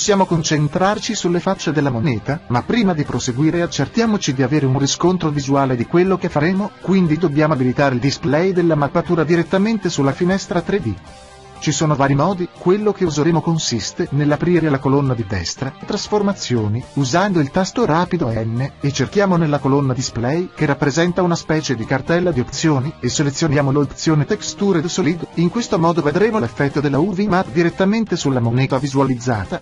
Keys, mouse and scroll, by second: 2.1-4.9 drag, 6.7 n, 7.4 n, 13.8 click, 17.3-21.1 drag, 21.0-23.8 middle drag, 23.8-27.5 drag, 27.7-29.6 middle drag.